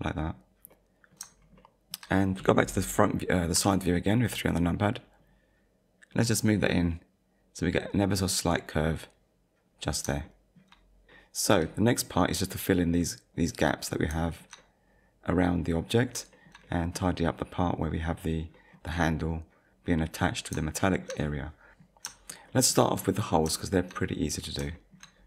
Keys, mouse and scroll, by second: 0.7 middle click, 1.3 shift+scroll down 1, 1.7 shift+middle click, 3.6 KP_3, 5.0 scroll up 1, 6.2 click, 9.7 scroll up 1, 10.2 shift+middle click, 10.7 shift+middle click, 12.3-12.7 scroll up 1, 14.3 shift+middle click, 16.0-16.3 scroll down 2, 16.3 shift+middle click, 16.6 middle click, 18.5 middle click, 20.8 shift+middle click, 21.6 middle click, 23.0 middle click, 23.6 shift+middle click, 24.4-24.7 scroll down 2, 24.7 shift+middle click.